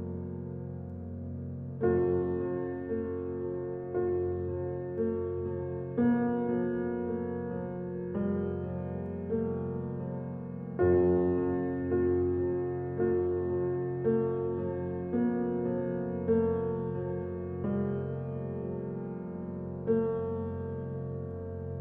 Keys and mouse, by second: 0.0 click, 0.5 click, 2.3 click, 2.8 drag, 3.7-4.3 drag, 7.9-8.6 drag, 11.6 click, 13.3 click, 14.6-15.9 alt+shift+drag, 16.3 shift+d, 17.5 click, 18.4 Tab, 18.9 ctrl+a, 19.0-20.4 typing, 21.7 typing.